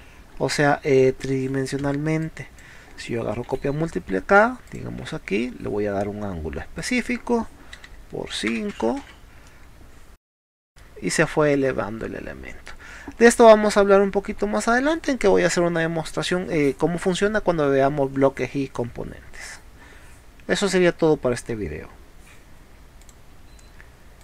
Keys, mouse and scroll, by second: 0.5 m, 1.9 space, 2.2 click, 3.5 m, 4.7 click, 6.8 ctrl+click, 9.1 space, 9.5 middle click, 10.4 scroll down 1, 10.8 middle click, 12.9 scroll down 1, 13.9 middle click, 14.8 middle click, 23.1 click.